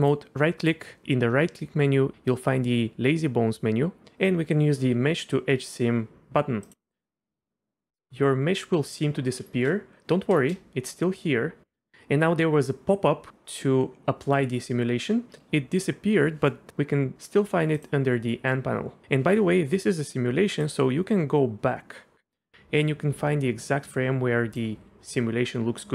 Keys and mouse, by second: 0.1-10.0 right drag, 10.4 space, 17.8 click, 20.6-24.6 drag.